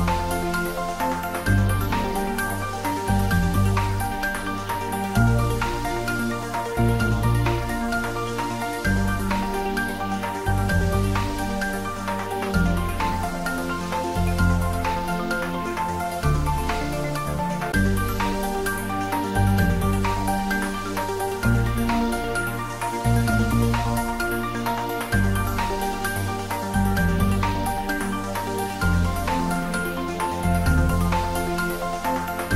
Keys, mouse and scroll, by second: 1.3-8.7 drag, 8.7-10.2 drag, 11.9 ctrl+t, 12.9 t, 13.7-17.3 drag, 17.3 x, 17.9 click, 18.6 x, 19.3 click, 19.6 Tab, 20.1 middle click, 21.3 click, 23.3 Tab, 25.0 click, 25.5 Tab, 26.5 1, 27.5 e.